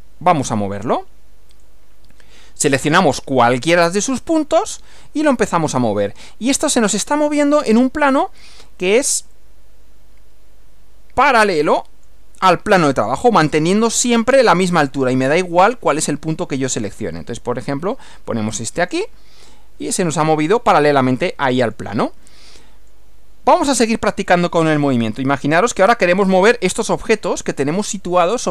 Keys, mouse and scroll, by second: 0.5 click, 1.6 click, 4.6 click, 9.4-12.3 middle drag, 16.8 middle click, 16.9 scroll down 1, 18.9 click, 19.5-22.0 middle drag, 22.3 middle click, 24.3-25.5 middle drag.